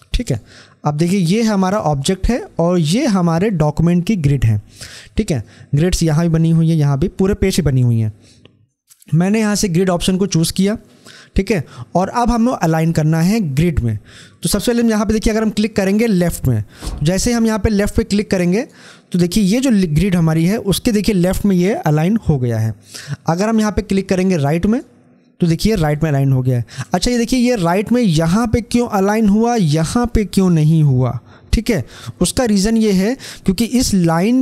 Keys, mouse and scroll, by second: 10.1-15.6 drag, 18.2 click, 24.4 click.